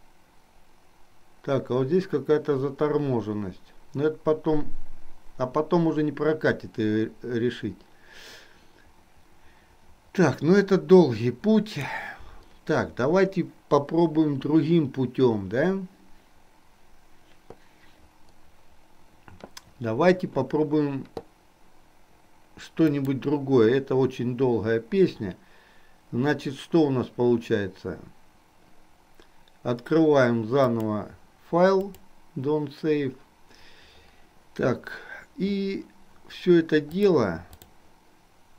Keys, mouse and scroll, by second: 22.9-33.2 drag, 37.1 click.